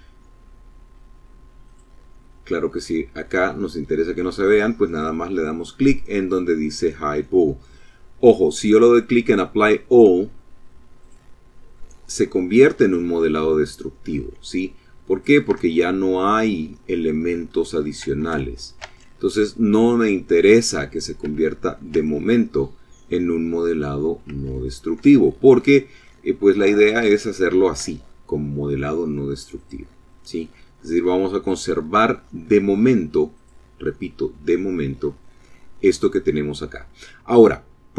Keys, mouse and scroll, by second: 0.5 click, 1.4-3.9 middle drag, 9.9 click, 10.6-13.2 middle drag, 14.0 click, 14.4 Tab, 15.3-16.8 drag, 16.9 Tab, 17.1 ctrl+middle click, 17.7 ctrl+z, 20.1 ctrl+z, 20.9 ctrl+z, 23.2 ctrl+z, 24.0-25.0 ctrl+drag, 26.0 Tab, 26.7 Tab, 28.5 click, 29.2-31.8 middle drag, 32.3 click, 33.7-36.1 middle drag.